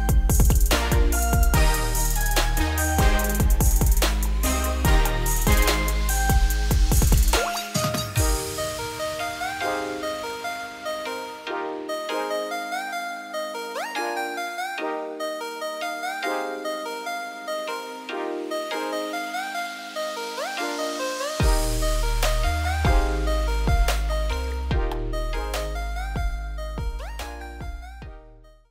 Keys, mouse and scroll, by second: 0.0 shift+click, 0.8 shift+click, 1.3 ctrl+click, 1.9 shift+click, 2.4 shift+click, 2.6 shift+middle click, 3.3 shift+click, 3.7 shift+click, 4.2 shift+click, 4.5 shift+middle click, 5.3 shift+click, 5.7 shift+click, 6.3 shift+click, 7.1 shift+click, 7.5 shift+middle click, 7.9 `, 8.6 z, 8.8 scroll up 1, 9.1 g, 11.3 z, 11.4 scroll down 4, 11.5 middle click, 11.9 Tab, 12.1-12.4 scroll down 5, 12.4 shift+middle drag, 12.6-13.0 scroll up 2, 13.0 ctrl+s, 13.3 click, 13.6 middle drag, 13.9 scroll up 1, 14.2 click, 14.6 `, 14.8 scroll down 2, 15.1-15.4 middle drag, 15.4-15.7 scroll up 5, 15.7-16.1 middle drag, 16.1 Tab, 16.5 click, 16.7 2, 16.8 click, 17.1 scroll down 2, 17.3 middle click, 17.6-18.4 scroll up 2, 18.4 shift+click, 18.7 middle click, 19.2 `, 19.5 scroll down 1, 19.6-20.8 middle drag, 20.8 ctrl+b, 22.8 Tab, 23.0 scroll down 1, 23.0 middle click, 23.6 scroll up 1, 23.9 middle click, 24.3 scroll up 1, 24.4 Tab, 25.1 middle click, 25.9 scroll down 1, 26.1 middle click, 26.9 scroll down 1, 27.1 middle click, 27.5 Tab, 27.7 scroll down 1, 27.8 middle click, 28.2 click.